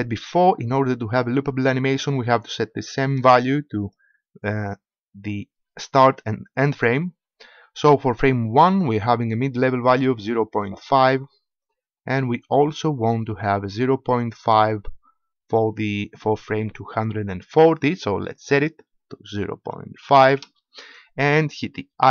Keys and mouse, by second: 1.3 click, 11.6 click, 11.9 click, 12.1 click, 12.3 click, 13.0 click, 13.2 click, 13.4-18.3 middle drag, 18.3-20.4 drag, 20.4-22.1 middle drag.